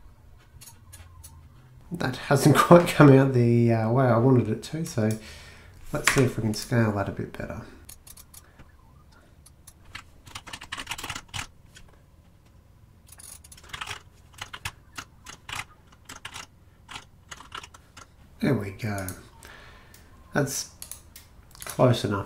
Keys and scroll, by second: 6.1 Escape, 9.9 Right, 10.2-11.9 typing, 10.5 Delete, 10.5 Delete, 13.5-14.6 typing, 14.5 shift+Home, 14.9 Tab, 15.6 shift+Tab, 16.0-17.5 typing, 16.9 Tab, 17.5 shift+Home, 17.9 Tab.